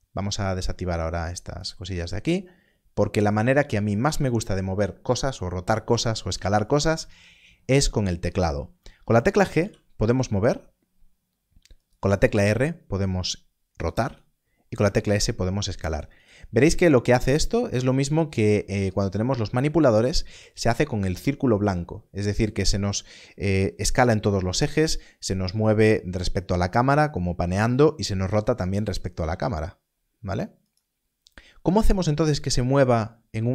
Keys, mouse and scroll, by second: 9.5 click, 11.8 right click, 29.1 right click, 32.8 right click.